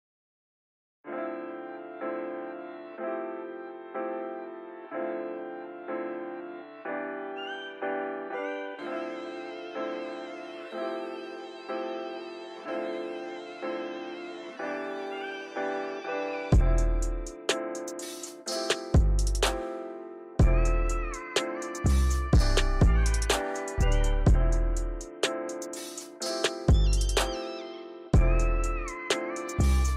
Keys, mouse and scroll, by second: 1.9 click, 2.1 click, 2.7 ctrl+z, 2.9 ctrl+z, 3.2 click, 6.2-7.4 drag, 8.5-9.8 drag, 10.3-11.3 drag, 11.5 click, 11.9 click, 12.4 click, 13.5 click, 13.9 click, 14.7 scroll down 1, 14.8 shift+middle click, 15.1 scroll up 3, 15.4 click, 16.6 click, 17.8-18.5 drag, 18.8 click, 19.9 click, 20.9-22.1 drag, 22.5 click, 23.7 click, 25.1 click, 26.1 shift+middle click, 26.5 click, 27.8-28.8 drag.